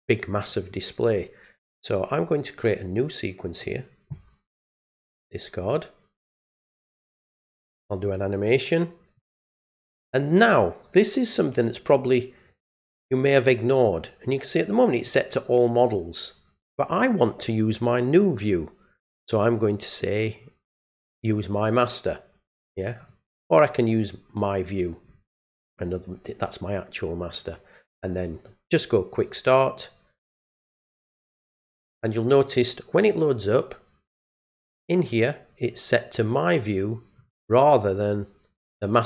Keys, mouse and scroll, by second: 3.5 click, 4.9 click, 7.6 click, 9.1 click, 15.0 click, 21.1 click, 23.0 click, 24.3 click, 29.1 click, 37.2 click.